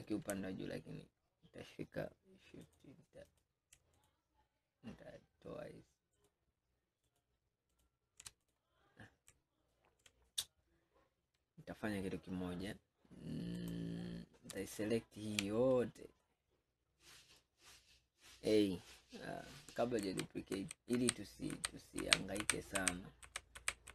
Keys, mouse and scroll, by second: 2.7 shift+click, 3.3 shift+click, 4.0 alt+shift+click, 6.3 alt+shift+click, 7.1 alt+shift+click, 7.8 alt+shift+click, 8.5 click, 13.6 click, 14.6 alt+click, 16.3-17.6 middle drag, 17.6-18.0 scroll down 2, 20.1 ctrl+z, 20.6 ctrl+z, 21.6 ctrl+z, 22.1 ctrl+z, 22.9 ctrl+z, 23.3 ctrl+z, 23.6 ctrl+z.